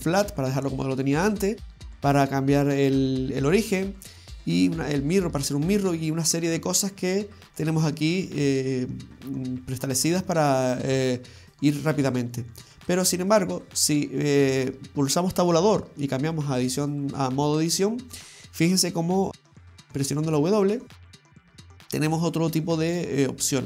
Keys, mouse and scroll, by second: 12.9 click, 15.7 Tab, 19.5 a, 20.1 w.